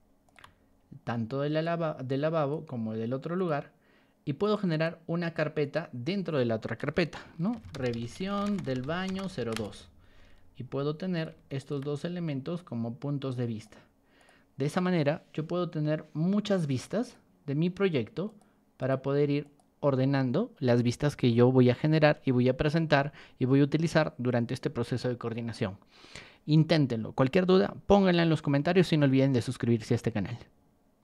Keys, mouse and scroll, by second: 0.2 shift+click, 1.6-2.5 drag, 3.3 click, 4.4 click, 4.7 right click, 5.6 click, 7.3-9.8 typing, 11.1 click, 11.5 shift+click, 12.5-13.6 drag, 14.1 click, 16.5 click, 17.0 click, 18.2 click, 18.7 click, 19.4 click, 30.9 click.